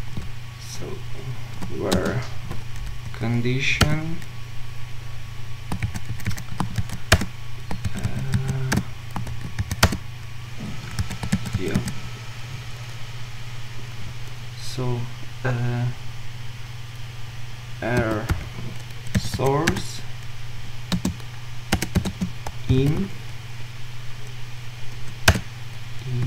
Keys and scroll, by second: 1.9 ctrl+alt+Left, 2.0 ctrl+shift+space, 7.8 Return, 9.3 ctrl+z, 25.4 Return.